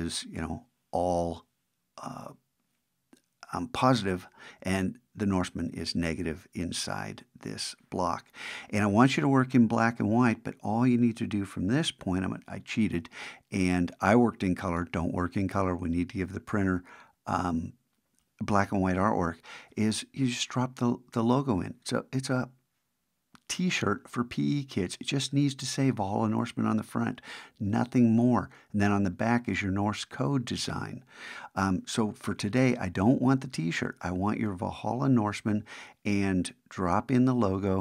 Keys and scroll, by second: 12.2 super+`, 32.4 super+`.